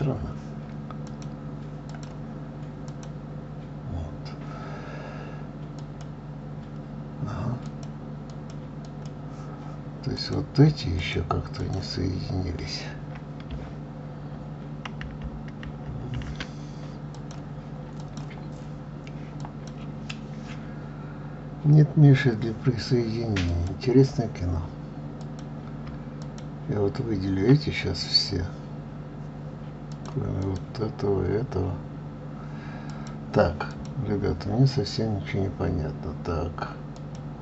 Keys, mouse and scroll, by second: 1.4 click, 2.2 click, 3.2 click, 6.1 click, 8.0 click, 8.6 click, 9.1 click, 10.5 click, 11.3 shift+click, 11.9 shift+click, 17.4 click, 18.3-21.3 drag, 23.8 click, 25.5 click, 26.5 shift+click, 30.2 click, 30.7 click, 33.2 click, 34.0 click, 37.3 click.